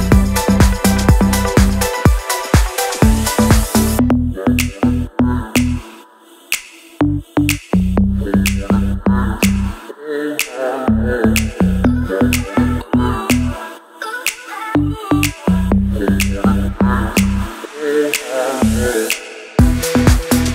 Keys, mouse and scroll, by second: 2.8 click, 4.9-9.3 drag, 10.0 right click, 10.9 click, 11.2-11.5 scroll down 1, 11.8 scroll up 1, 12.1 click, 15.3 click, 18.4 scroll up 1, 18.9 click, 19.7 right click, 20.3 click.